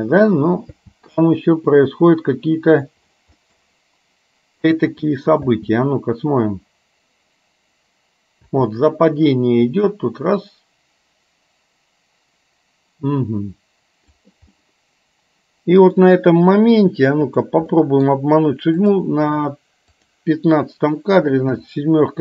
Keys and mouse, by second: 0.8 space, 1.3-2.9 middle drag, 3.4 middle click, 4.6 click, 5.5 space, 9.8-14.3 drag, 14.5-16.0 middle drag, 17.3 click, 17.9 middle click, 18.9 click, 20.0 click, 21.6 KP_7.